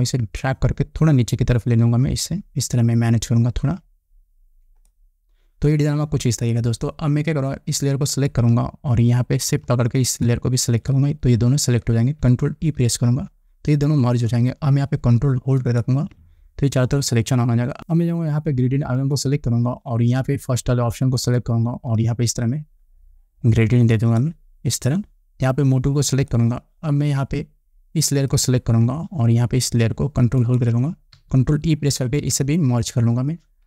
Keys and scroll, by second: 13.3 ctrl+e, 32.6 ctrl+e.